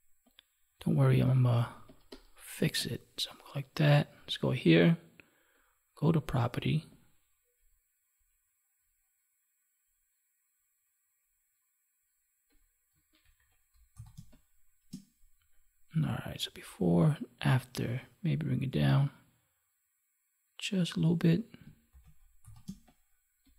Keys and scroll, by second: 1.5 space, 13.1 ctrl+1, 14.1 space, 21.8 ctrl+s, 22.6 space.